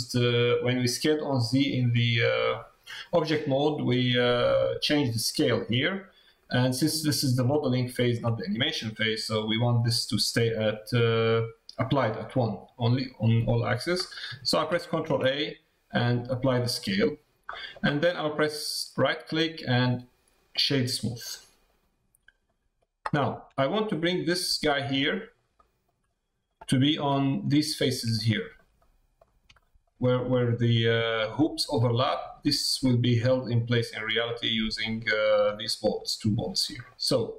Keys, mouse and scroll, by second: 6.0 middle click, 7.6 shift+middle click, 8.4 middle click, 8.9 middle click, 14.2 middle click, 17.5 middle click, 19.4-20.7 right drag, 21.2 middle click, 22.4 middle click, 23.6 shift+middle click, 24.1 shift+middle click, 25.0 middle click, 25.5 shift+middle click, 26.0 middle click, 26.7 shift+middle click, 28.1 shift+middle click, 28.7 middle click, 29.6 shift+middle click, 35.0 middle click, 36.6 middle click.